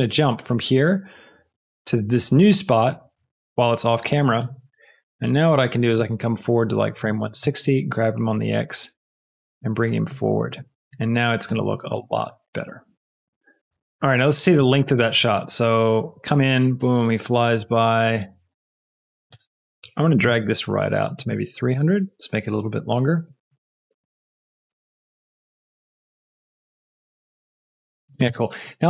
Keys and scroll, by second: 7.3 g, 7.5 x, 12.2 g, 12.4 x, 14.5 space, 19.2 space, 20.1 g.